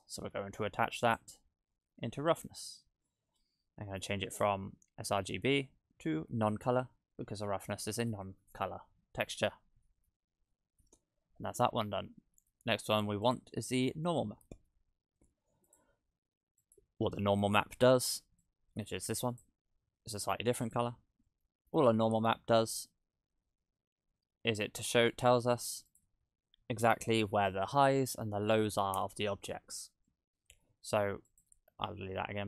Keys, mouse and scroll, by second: 2.2 click, 4.0 click, 7.5 click, 8.7-9.3 scroll down 4, 9.3 middle click, 11.5-13.3 scroll up 2, 13.3 click, 14.1 shift+d, 16.6 click, 20.8 click, 21.3 middle click, 21.9 scroll up 3, 22.8 shift+a, 30.1 middle click, 31.3 click, 31.8 x.